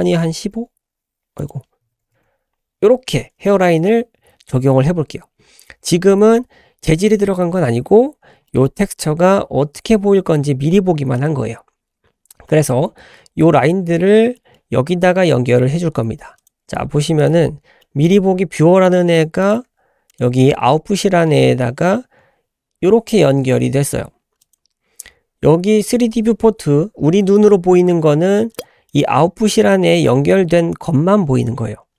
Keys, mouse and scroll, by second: 1.4 click, 4.9-5.2 scroll down 3, 5.4-5.8 scroll up 3, 7.8-8.5 scroll down 5, 8.5 middle click, 11.1 click, 12.0-12.5 scroll down 3, 12.5 middle click, 14.4 middle click, 15.8 scroll down 2, 16.4 click, 16.7 g, 17.5 scroll up 2, 17.8 middle click, 18.2 scroll up 2, 19.4 click, 19.6 g, 24.4 click, 28.5 click, 28.9-29.8 drag.